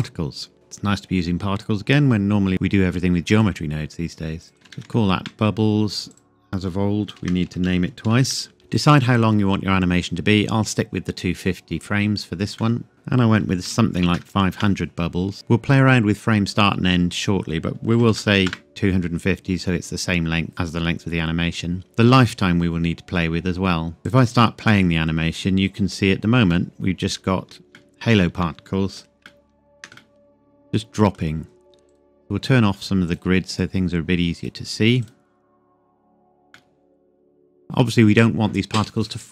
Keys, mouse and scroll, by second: 0.0 click, 3.4 click, 4.5 typing, 5.2 KP_Enter, 6.1 click, 7.2-8.3 typing, 12.6 click, 12.8 middle click, 12.9 click, 13.7 KP_5, 14.0 KP_0, 14.5 KP_Enter, 17.2 click, 17.9 KP_2, 18.1 KP_5, 18.2 KP_0, 18.5 KP_Enter, 24.0 click, 24.9-26.0 scroll up 1, 26.0-26.5 scroll down 1, 26.5 middle click, 29.2 shift+middle click, 30.3 middle click, 31.9 click, 35.9-36.5 scroll up 1, 36.5 middle click, 37.1-37.5 scroll up 1.